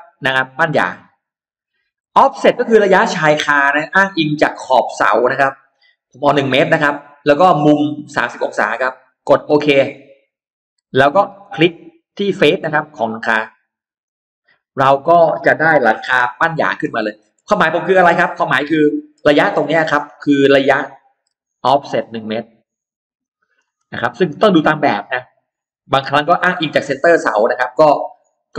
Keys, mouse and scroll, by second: 0.7 click, 9.7 click, 13.8 click, 16.6-17.4 scroll down 2, 16.8 middle click, 17.6-18.6 scroll up 2, 18.6 middle click, 21.2 l, 21.8 click, 23.0 click, 23.4 space, 24.2 click, 25.8 click, 26.8 click, 27.2-28.2 middle drag.